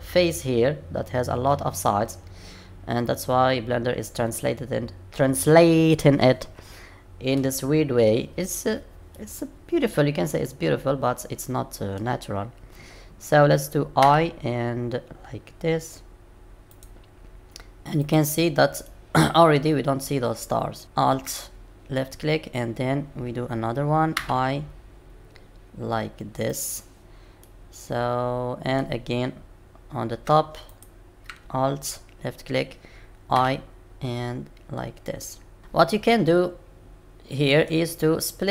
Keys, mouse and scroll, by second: 9.1 middle click, 18.0 click, 18.8 middle click, 20.8 alt+click, 27.4 middle click, 30.7 alt+click.